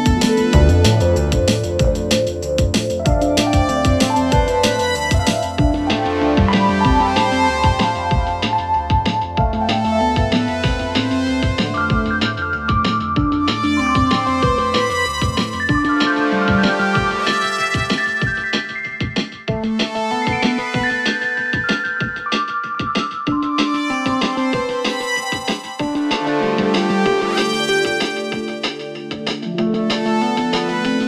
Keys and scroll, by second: 27.8 ctrl+c, 30.6 ctrl+v.